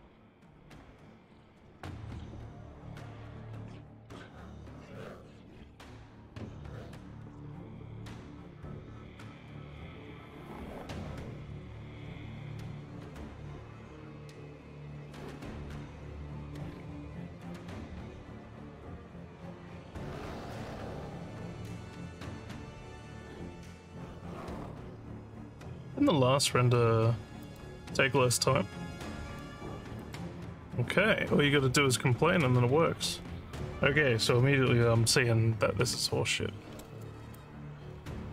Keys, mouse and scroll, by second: 25.4 click, 27.4 click, 30.0 click, 37.4-38.3 alt+drag.